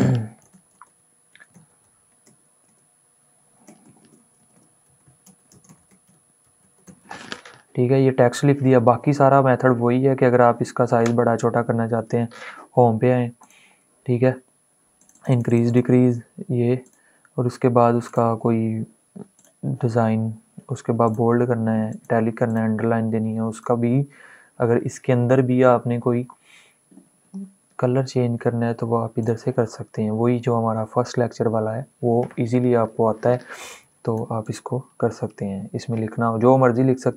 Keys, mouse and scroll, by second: 0.0-2.1 typing, 4.3-7.1 typing, 9.0 typing, 9.4 ctrl+a, 11.1 ., 13.1 click, 28.9 click, 29.0 click, 33.4 click, 37.0-37.1 drag.